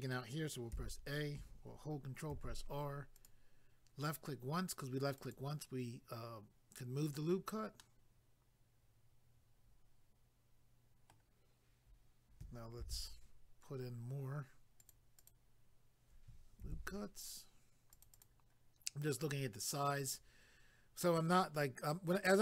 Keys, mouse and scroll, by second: 0.7 a, 2.3 ctrl+r, 3.2 click, 3.3 click, 5.2 click, 5.3 click, 7.0 click, 7.2 click, 7.8 middle click, 12.8 ctrl+r, 13.4-13.8 scroll up 1, 14.8 click, 14.9 click, 15.2 click, 15.3 double click, 16.6 ctrl+r, 17.9 click, 18.0 click, 18.1 click, 19.4 double click.